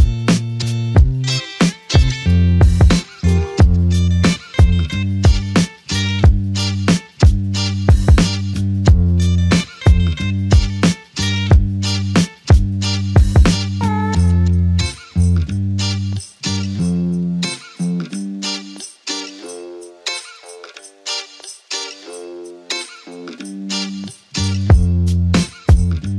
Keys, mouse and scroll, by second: 2.6 alt+click, 6.0 f, 6.9 double click, 9.8 shift+click, 12.6 alt+click, 14.9 shift+click, 16.3 shift+click, 20.1 alt+shift+click, 20.6 alt+click, 21.3 shift+click, 24.1 alt+click, 24.6 alt+click, 25.3 shift+click.